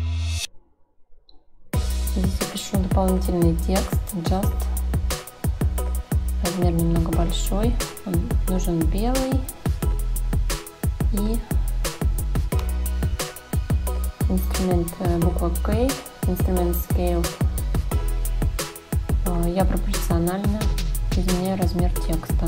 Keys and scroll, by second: 4.2-5.5 typing, 7.1 Escape, 17.5 k.